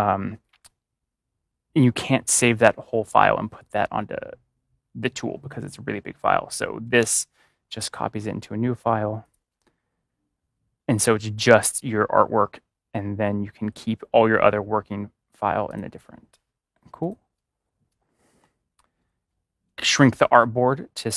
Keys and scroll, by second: 6.9 ctrl+v.